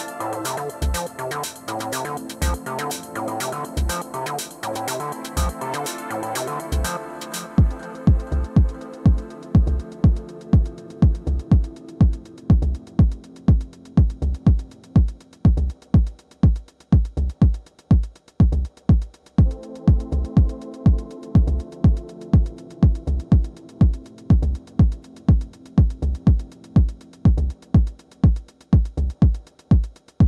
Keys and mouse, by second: 0.6-2.0 drag, 3.3 alt+click, 4.4-6.6 alt+drag, 10.2 click, 15.8-17.9 drag, 18.8 click, 27.4-29.2 drag.